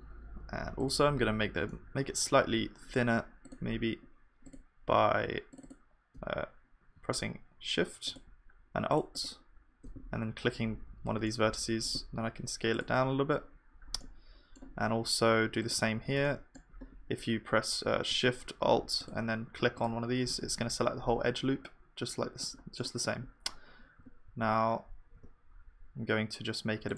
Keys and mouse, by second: 1.6-2.8 drag, 2.8 middle click, 3.7-11.3 drag, 11.3 middle click, 12.2 click, 12.2 s, 15.7-18.1 drag, 16.2-22.2 middle drag, 22.4-26.9 middle drag, 24.0 g.